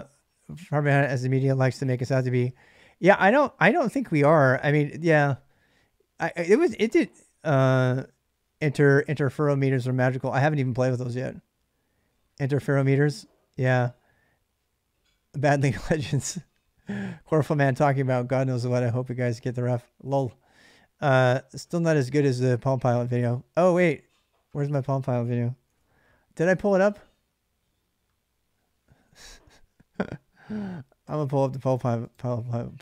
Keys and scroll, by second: 25.4 alt+Tab.